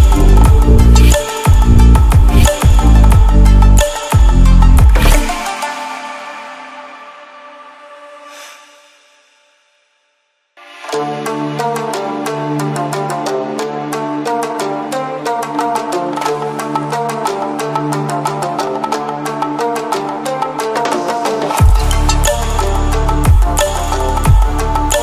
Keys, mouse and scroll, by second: 1.0-2.7 drag, 3.8 ctrl+w, 6.6 ctrl+w, 11.2 ctrl+w, 11.9-12.8 drag, 14.4 ctrl+w, 16.3 ctrl+w, 17.9 ctrl+alt+scroll down 1, 18.4-19.1 ctrl+alt+scroll up 1, 19.1 ctrl+alt+scroll down 1, 20.6-22.1 drag, 23.6-25.0 drag.